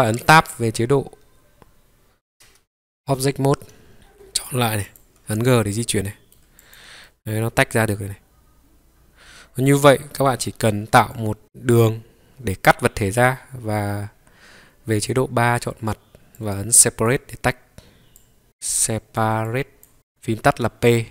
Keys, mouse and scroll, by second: 0.3 scroll down 3, 2.4 Tab, 4.0 click, 4.0 g, 4.5 click, 4.9 click, 5.8 g, 5.9 middle click, 6.6 click, 7.0-10.3 middle drag.